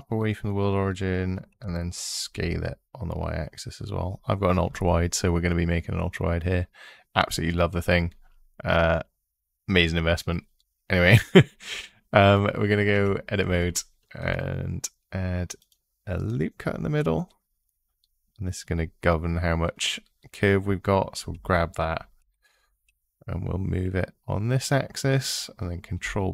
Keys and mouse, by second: 1.3 s, 2.1 y, 12.7 Tab, 14.0 ctrl+r, 15.4 click, 16.4 click, 21.1 g, 22.0 x, 25.0 click, 25.8 ctrl+b.